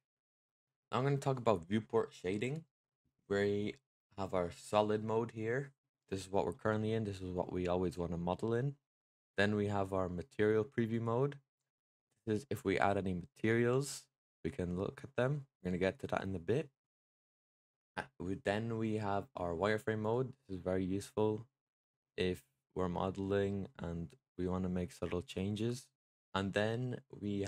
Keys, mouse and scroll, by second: 0.9-2.7 middle drag, 5.3-6.7 middle drag, 6.7 scroll up 3, 7.3-9.0 middle drag, 10.8 click, 11.6-14.6 middle drag, 19.9 click, 20.5-26.1 middle drag.